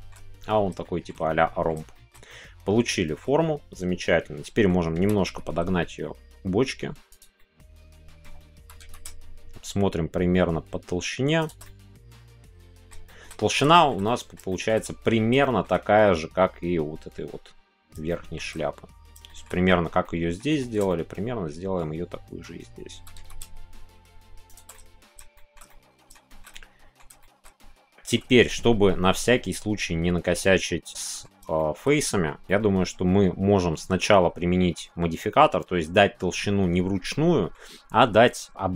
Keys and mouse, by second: 0.8 shift+middle click, 1.9-3.2 shift+middle drag, 4.4 middle click, 7.1 click, 7.4-8.2 middle drag, 11.4 shift+click, 11.6-12.8 middle drag, 13.1 shift+middle click, 13.7 shift+middle click, 14.0 middle click, 14.5 shift+middle click, 15.4 shift+middle click, 18.1 shift+middle click, 19.3 shift+middle click, 20.0 middle click, 20.6-22.4 shift+middle drag, 24.5 shift+click, 24.7 middle click, 25.3 shift+click, 25.6 middle click, 26.3 shift+middle click, 26.5 middle click, 27.2 shift+middle click, 27.9 shift+middle click, 28.4-31.2 middle drag, 31.5 shift+middle click, 32.4-35.9 middle drag, 37.1 middle click.